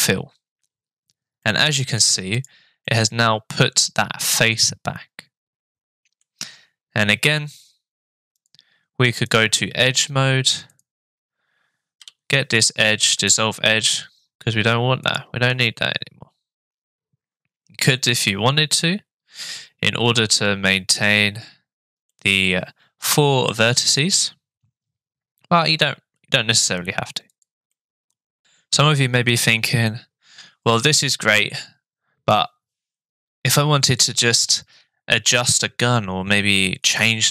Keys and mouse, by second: 1.5 middle click, 2.8-6.2 middle drag, 8.4 click, 9.3 click, 10.7 click, 12.0 Delete, 15.0 click, 15.5 Tab, 17.9 Tab, 18.3 middle click, 22.1-23.5 middle drag, 27.3 click, 27.8 middle click.